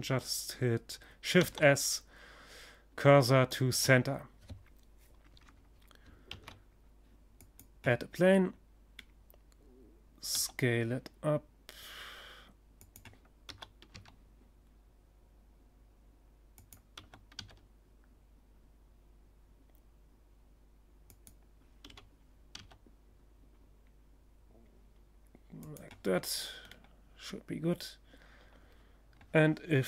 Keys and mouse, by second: 4.8 shift+a, 6.9-8.6 middle drag, 8.8 s, 11.9 s, 12.6 click, 12.8 click, 13.0 click, 13.2 click, 15.1-16.9 drag, 15.5 s, 19.7 click, 20.3 g, 21.6-24.2 middle drag, 24.6-26.2 drag, 26.2 middle click, 26.2-27.3 drag.